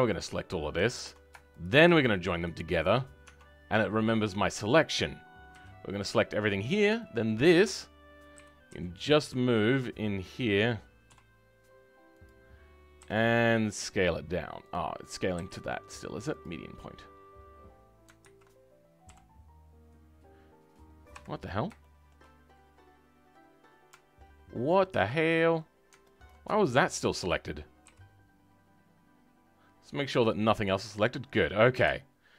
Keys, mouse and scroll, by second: 1.6 shift+click, 2.9-26.2 right drag, 26.2 ctrl+click, 27.9 g.